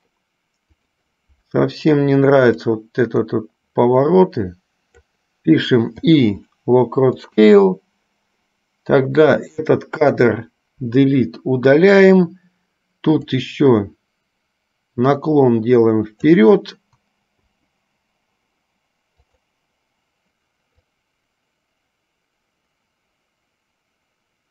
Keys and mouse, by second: 0.9 click, 2.9-5.3 drag, 7.4 click, 9.4 click, 13.4-16.7 drag, 19.4 click, 21.1-24.5 drag.